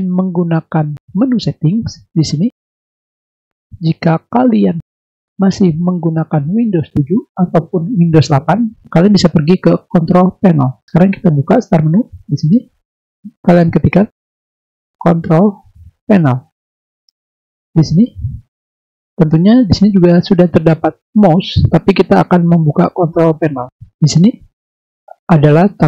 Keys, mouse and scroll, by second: 11.6 click, 14.5-15.2 typing, 23.5 click, 25.8 click.